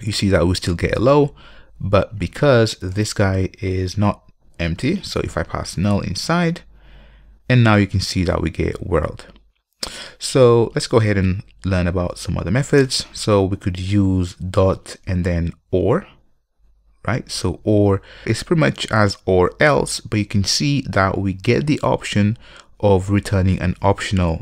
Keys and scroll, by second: 7.0 ctrl+F5.